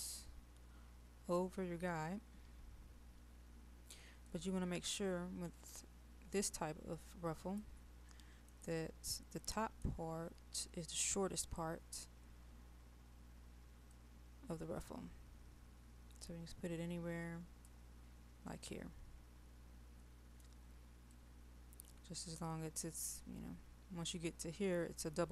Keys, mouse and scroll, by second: 4.3 click, 8.2 middle click, 8.8-9.4 scroll down 1, 9.4 middle click, 13.9-18.4 drag, 18.5-21.2 middle drag, 21.2-25.3 drag.